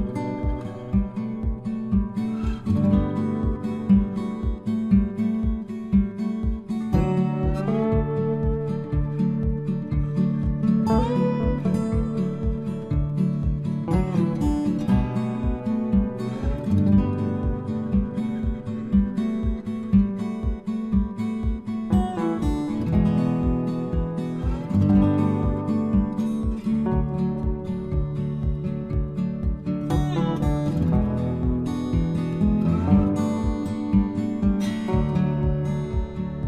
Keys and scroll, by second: 3.5 Return, 14.9 Return.